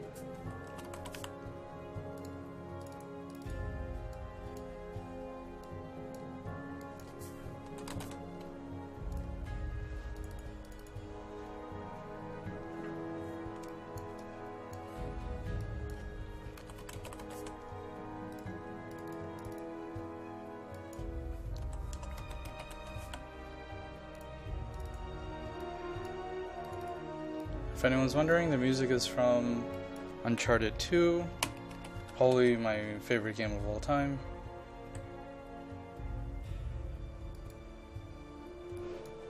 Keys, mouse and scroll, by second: 0.4-1.7 typing, 7.5-8.6 typing, 9.1 click, 13.8-15.4 ctrl+drag, 16.4-17.9 typing, 18.3 click, 21.6-23.6 typing, 24.2-28.6 drag, 30.3-32.9 typing, 34.9 1, 37.4 click.